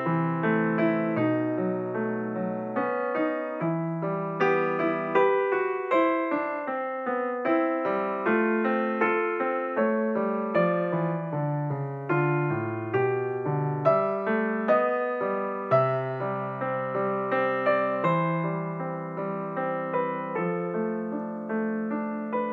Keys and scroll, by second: 11.3 g, 17.1 g.